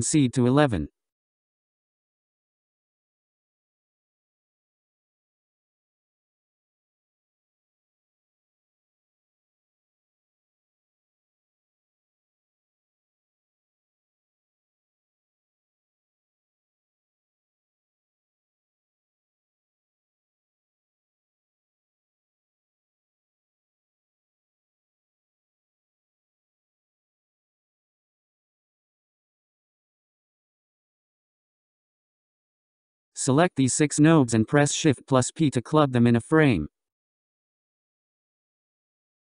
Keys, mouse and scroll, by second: 4.0-7.0 drag, 14.2-16.6 scroll down 19, 17.4-20.2 middle drag, 20.2-20.7 scroll up 3, 20.7-21.3 scroll down 4, 21.3-22.6 scroll up 8, 22.6-23.3 scroll up 8, 24.0-27.0 drag, 32.0-33.7 scroll down 17, 33.7-37.2 drag, 39.1-39.3 drag.